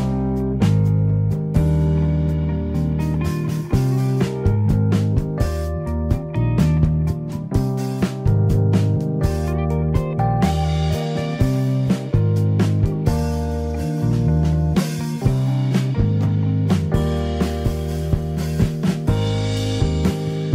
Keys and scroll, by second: 13.2 3, 13.4 Return.